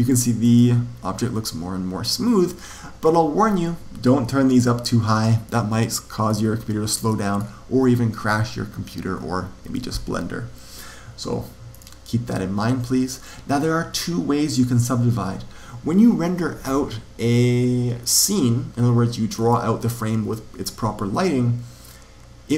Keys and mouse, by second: 11.6 click, 19.3 click, 22.4 click.